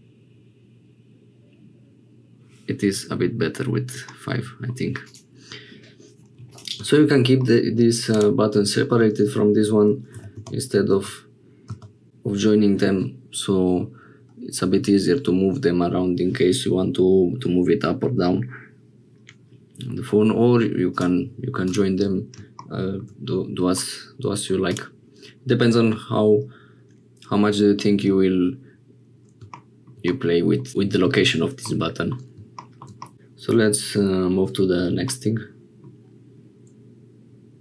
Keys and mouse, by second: 4.0 middle click, 6.4 middle click, 7.4 middle click, 10.1 g, 20.9 click, 22.8 shift+click, 23.7 click, 30.1 middle click, 31.6 middle click, 33.0 middle click, 35.1 middle click.